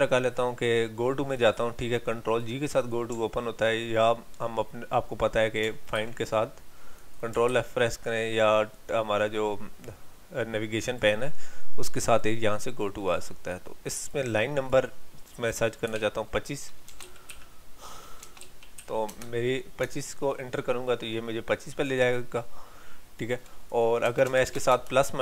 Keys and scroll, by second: 5.9 ctrl+f.